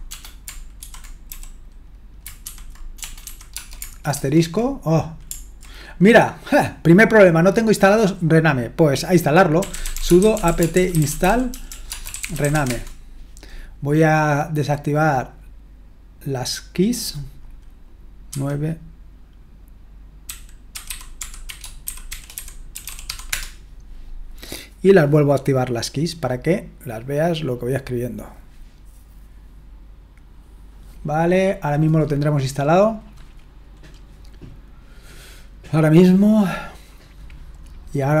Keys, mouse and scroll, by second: 0.8-1.3 typing, 2.4-3.5 typing, 4.2 shift+Return, 9.4-13.0 typing, 16.3-35.8 drag.